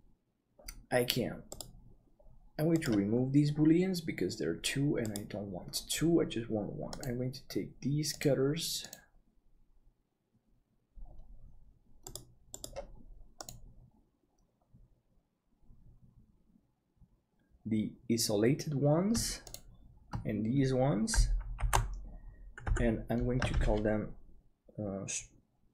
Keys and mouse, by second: 5.0-19.1 drag, 21.7 ctrl+j, 22.7 F2.